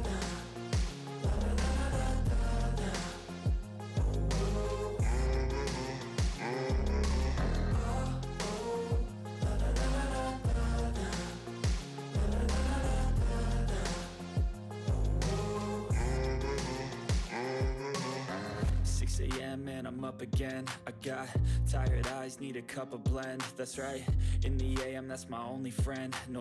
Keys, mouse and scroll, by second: 0.5 click, 1.9-3.1 typing, 8.4-9.9 typing, 10.3 click, 12.2 click, 12.3 click, 12.8-13.9 typing, 14.1 click, 16.1 click, 16.2 click, 16.9-18.8 typing, 18.2 click, 20.0-22.0 typing, 22.0 ctrl+s, 25.4-26.4 typing.